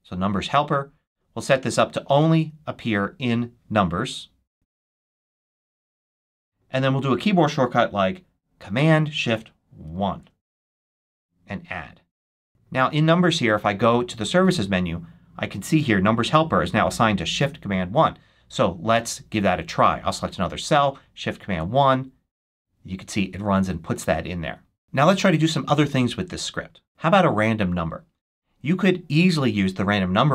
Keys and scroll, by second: 0.0-0.1 typing, 9.8 shift+super+1, 21.3 shift+super+1.